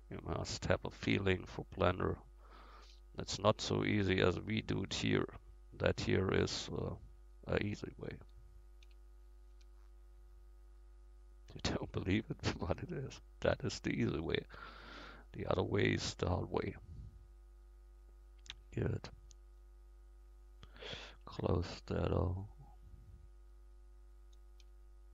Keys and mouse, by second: 2.9 f, 7.8-9.1 drag, 8.8 f, 9.5-11.0 middle drag, 9.5 a, 11.1 middle click, 11.6 middle click, 12.3-13.5 drag, 13.5 f, 21.3 f, 22.5 click, 22.7-24.2 drag.